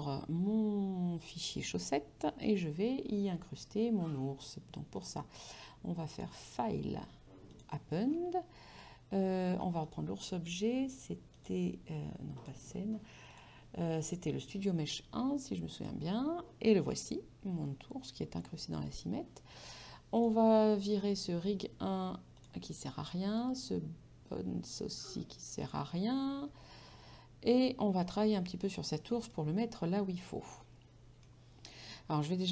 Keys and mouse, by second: 2.0 middle click, 5.0 click, 6.2 click, 7.7 click, 9.9 click, 11.4 click, 15.8 click, 16.9 middle click, 20.2 click, 21.1 right click, 22.4 click, 23.4 right click, 25.7 click, 27.5 middle click, 28.6 right click, 29.8 middle click.